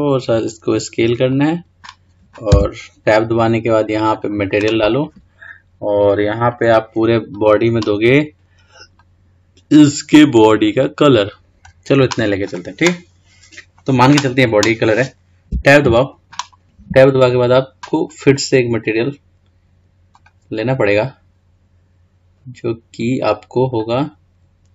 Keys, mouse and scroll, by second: 2.6 Tab, 4.3-6.7 drag, 7.5 click, 12.6 click, 13.2 scroll down 2, 15.7 Tab, 20.3-23.3 drag, 24.0-24.7 drag.